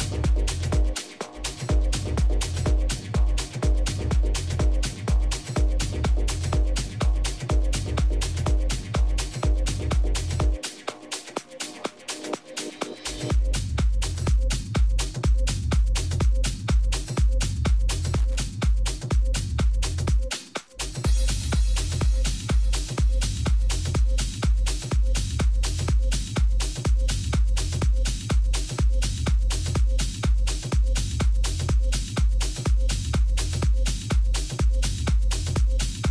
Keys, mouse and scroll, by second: 8.9-12.2 middle drag, 12.3-15.9 middle drag, 15.1 a, 15.9-17.6 right drag, 18.3 middle click, 18.5 r, 25.2 g, 30.8 ctrl+z, 34.0 a, 35.1-36.1 middle drag.